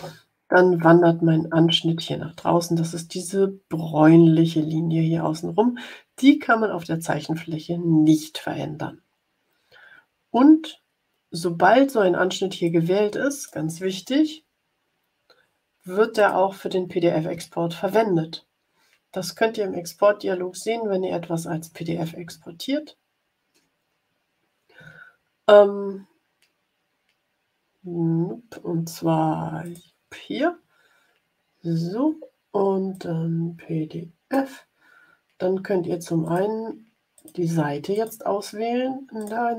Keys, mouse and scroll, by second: 12.5-13.6 drag, 16.0 click, 22.3-23.2 ctrl+scroll down 4, 23.7 scroll up 2, 29.5 click, 32.8-34.5 drag, 36.2 click, 37.1 click, 37.8 click, 39.0 click.